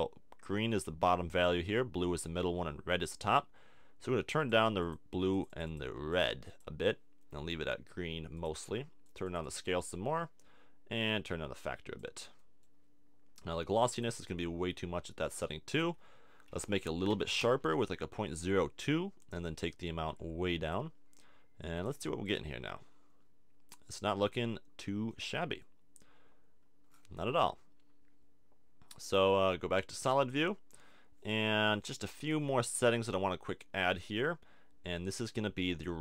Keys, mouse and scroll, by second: 9.0-17.6 drag, 19.3-21.3 drag, 21.7-25.6 drag, 27.8 middle click, 29.0-31.0 drag, 32.8-34.0 drag, 35.3 click.